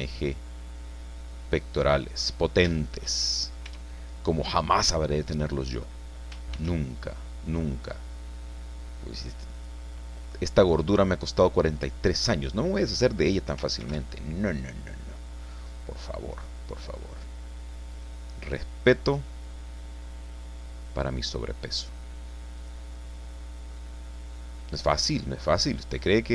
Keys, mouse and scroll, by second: 2.4 scroll up 1, 2.8 shift+click, 3.2 shift+click, 3.7 shift+Tab, 4.7 scroll down 2, 5.1 click, 6.5 ctrl+r, 7.6-8.3 scroll up 4, 9.5 click, 10.2 click, 13.8 ctrl+r, 17.9 click, 22.6 click, 22.9 middle click.